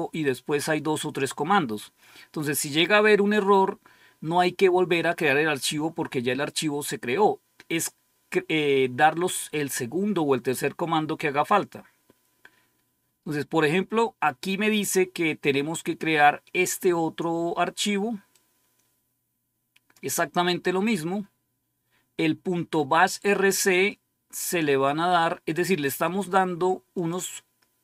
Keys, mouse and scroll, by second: 6.4 click, 11.1-12.4 scroll down 2, 12.9-14.4 scroll up 2, 14.4 scroll up 1, 15.9-16.4 scroll down 2, 18.2-19.9 drag, 26.0 right click, 26.9 click.